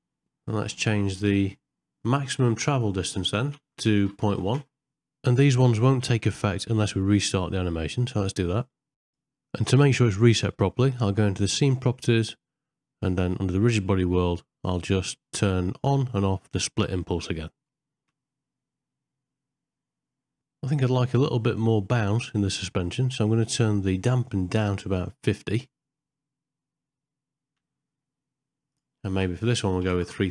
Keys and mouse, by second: 3.0-4.6 drag, 5.8 shift+Left, 6.3 space, 7.9 shift+Left, 11.7 click, 12.7-15.0 middle drag, 16.5 click, 17.6 space, 20.6-22.0 middle drag, 25.2-26.7 drag, 28.7-30.3 drag, 30.1 KP_0.